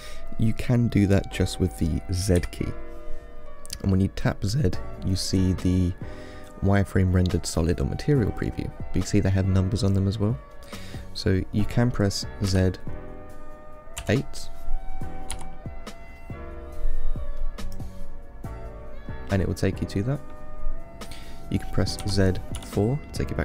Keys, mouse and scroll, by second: 2.6 z, 12.7 z, 18.5 click, 19.6-22.2 middle drag, 22.2 z.